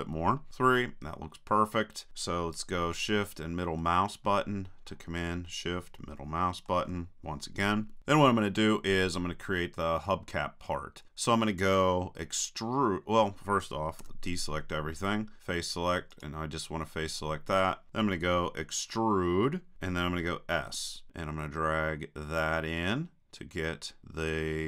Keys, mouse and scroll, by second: 0.5 KP_3, 3.0-7.8 drag, 14.1 a, 16.2-17.9 drag, 19.7 e.